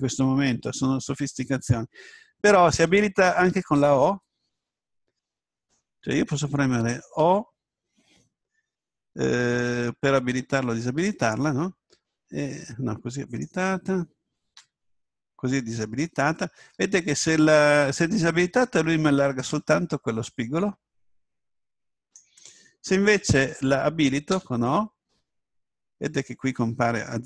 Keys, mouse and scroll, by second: 5.6 right click, 7.2 o, 11.9 s, 13.4-14.5 right drag, 14.5 click, 14.5 o, 16.6 s, 22.1 right click, 24.3 o.